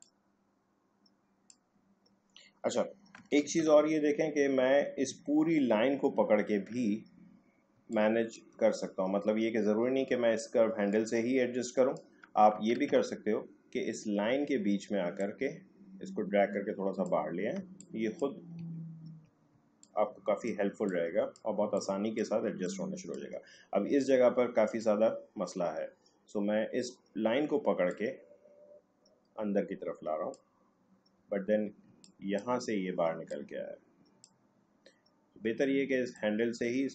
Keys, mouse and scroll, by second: 3.4 ctrl+z, 5.2 alt+scroll down 2, 6.2-6.7 alt+scroll up 1, 7.8 space, 7.9 click, 8.2 space, 10.8-12.7 drag, 12.7 ctrl+z, 15.1-17.6 drag, 17.6 space, 17.8 click, 18.0 space, 18.8-19.2 alt+scroll down 1, 19.5-22.8 typing, 19.8 click, 20.9 click, 21.8 click, 22.6 click, 24.2 alt+scroll up 2, 27.9 click, 31.4 alt+scroll down 1, 31.9 space, 32.0 click, 32.4 space, 33.3-36.9 drag.